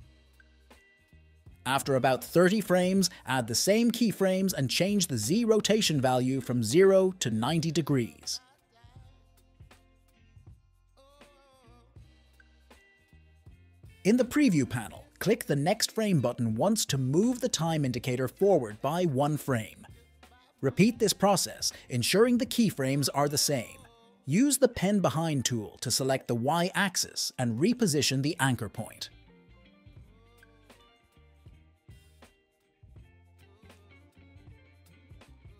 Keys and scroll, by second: 7.7-8.6 typing, 33.3 `.